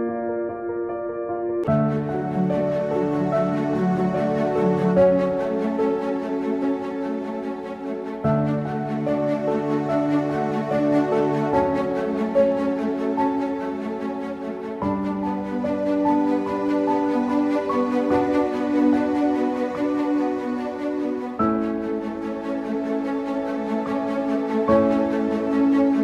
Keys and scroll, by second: 0.0-1.7 typing, 1.7 ctrl+Print, 5.2 t, 7.0 ctrl+Print, 7.0 typing, 9.0 ctrl+Print, 9.0 /, 9.2 ctrl+c, 9.6 ctrl+v, 10.7 ctrl+v, 10.7 /, 15.5 typing, 16.9-20.3 typing, 22.5-26.0 typing.